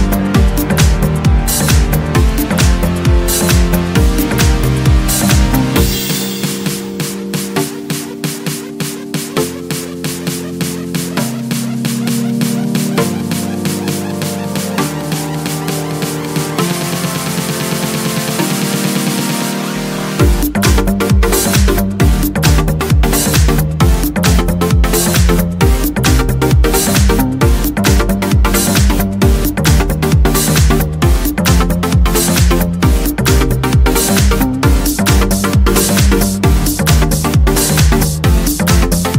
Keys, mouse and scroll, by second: 0.3-1.6 scroll down 2, 4.8 click, 6.5 click, 8.2 5, 9.3 click, 10.9 middle click, 12.0 click, 13.4 click, 15.2 click, 16.4 click, 17.7 click, 18.6 click, 20.1 click, 21.4 1, 21.7 4, 22.5 0, 23.1 click, 26.0 click, 26.8 click, 27.6 ctrl+click, 28.8 click, 30.2 scroll down 2, 30.8 scroll up 2, 31.0-31.6 scroll down 2, 32.2 click, 33.0 click, 33.5 click, 35.3-36.9 drag, 38.3-39.1 drag.